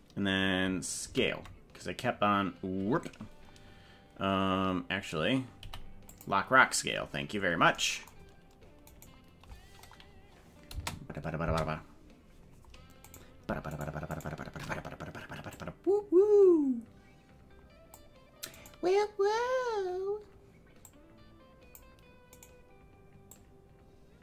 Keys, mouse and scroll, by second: 1.1 alt+s, 5.5 i, 8.8 right click, 9.7-10.1 scroll up 4, 10.6 space, 11.6 space, 13.1 right click, 13.8 shift+right click, 15.5-18.0 drag, 18.7 right click, 20.8-22.0 drag, 22.4 right click, 23.3-24.2 drag.